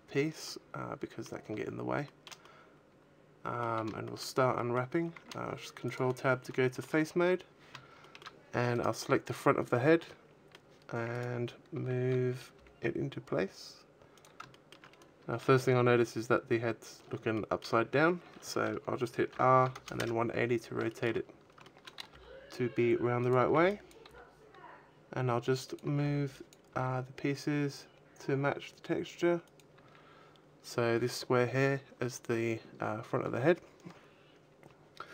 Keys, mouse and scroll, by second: 0.3 middle click, 1.9 shift+middle click, 2.3 middle click, 3.9 shift+middle click, 4.9 ctrl+Tab, 4.9 middle click, 6.5 shift+middle click, 7.1-7.8 scroll up 2, 7.9 shift+middle click, 8.5 right click, 9.9 middle click, 11.0 right click, 11.6 a, 12.0 a, 12.4 g, 14.1 click, 14.4 shift+middle click, 14.8-15.2 scroll up 3, 17.2 shift+middle click, 19.2 r, 20.8 shift+middle click, 21.1-21.5 scroll up 2, 21.5 shift+middle click, 22.0 g, 23.0 click, 23.0 a, 23.3 b, 23.8 g, 25.6 click, 25.7 a, 25.9 b, 26.6 g, 29.4 click, 29.6 a.